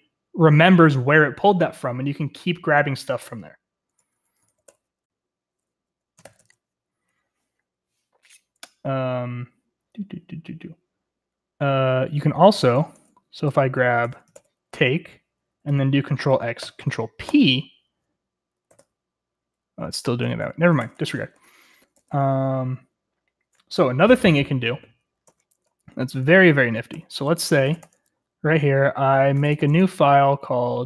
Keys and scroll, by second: 4.0 Escape, 4.2-5.1 typing, 6.2 typing, 6.4 Escape, 12.1-14.1 typing, 12.9 Return, 14.3 ctrl+n, 16.6 ctrl+x, 17.3 ctrl+p, 18.7 ctrl+x, 18.8 ctrl+p, 20.1-21.9 typing, 25.2 Escape, 26.9 ctrl+t, 27.4-30.8 typing.